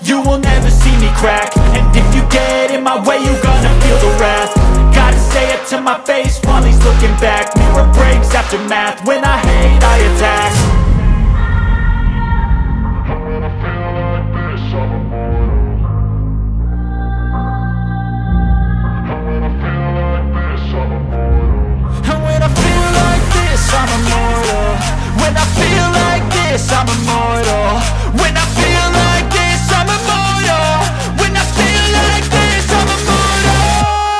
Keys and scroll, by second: 11.9 space, 12.7 ctrl+q, 13.2 F2, 17.4 space, 18.1 c, 18.5 Escape, 28.3 space, 29.9 g, 32.8 space.